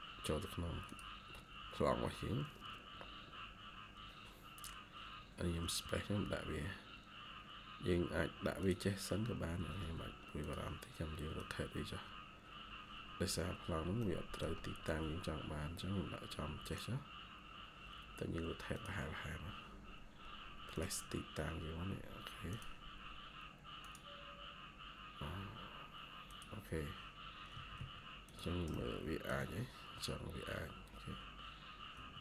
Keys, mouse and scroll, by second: 5.5 space, 6.4 scroll up 1, 9.5 Escape, 9.7 Escape, 12.9 scroll down 1, 13.9 middle click, 17.2 scroll up 1, 21.0 scroll up 1, 27.4 Escape, 27.7 Escape, 31.5 scroll down 1, 31.8 Escape, 32.1 Escape.